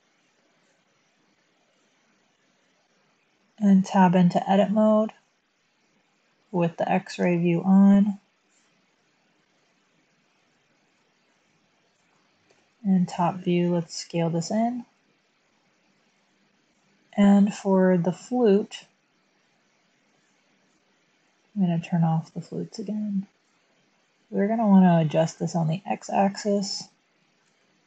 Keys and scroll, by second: 3.5 Tab, 7.2 1, 12.4 7, 13.7-14.1 typing, 16.6 Tab, 18.8 typing, 25.4 typing, 26.5-26.9 typing, 27.4 Tab.